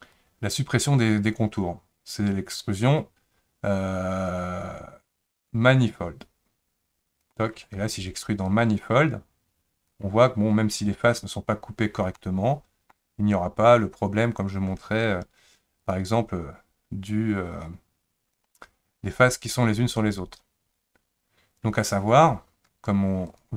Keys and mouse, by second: 8.6-9.9 drag, 12.2 middle click, 15.8 click, 16.6-18.4 drag, 23.3 click.